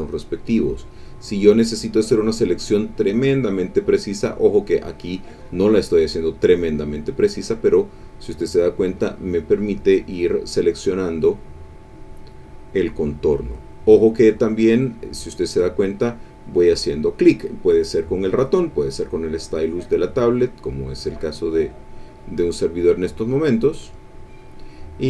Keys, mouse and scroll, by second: 0.6 click, 1.3 click, 2.2 click, 2.7 click, 3.2 click, 4.0 click, 4.6 click, 5.4 click, 5.9 click, 6.7 click, 7.1 click, 7.5 click, 8.3 click, 8.7 click, 9.2 click, 10.1 click, 10.4 click, 10.7 click, 11.1 click, 11.5 click, 11.8-13.1 drag, 13.2 click, 14.8 click, 15.2 click, 15.8 click, 16.4 click, 17.0 click, 17.5 click, 18.1 click, 18.8 click, 19.3 click, 20.3 click, 20.9 click, 21.6 click, 22.1 click, 22.5 click, 22.9 click, 23.3 click, 23.8 click, 24.5 click.